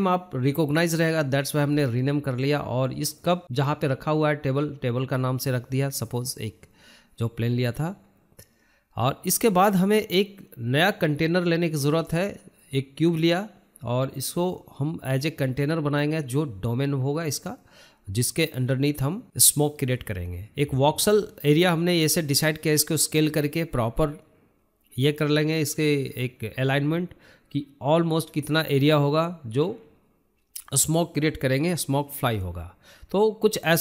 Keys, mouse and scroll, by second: 0.1 click, 0.8-2.9 drag, 4.7 t, 5.9-6.2 scroll down 2, 6.2 shift+middle click, 7.1 click, 7.4-8.7 shift+middle drag, 8.7 click, 8.8-11.2 drag, 11.2-11.7 shift+middle drag, 11.7 click, 11.9 scroll down 1, 12.0 middle drag, 12.2-12.6 scroll up 3, 12.6-13.5 shift+middle drag, 13.5 scroll up 1, 13.7-14.4 shift+middle drag, 14.4 click, 14.6-15.1 scroll down 4, 14.8 middle click, 15.1 shift+middle drag, 15.4 drag, 16.9 click, 17.5 shift+a, 19.5-20.3 shift+middle drag, 20.3 scroll up 2, 20.5-22.0 shift+middle drag, 22.0 KP_1, 22.5-22.8 scroll up 3, 22.8-24.3 shift+middle drag, 24.3 s, 25.9-26.3 scroll down 3, 26.4 shift+middle click, 27.2 shift+z, 27.9 g, 29.5-29.9 scroll down 4, 30.0 shift+middle click, 30.2 scroll up 5, 30.5-31.7 shift+middle drag, 31.7 s.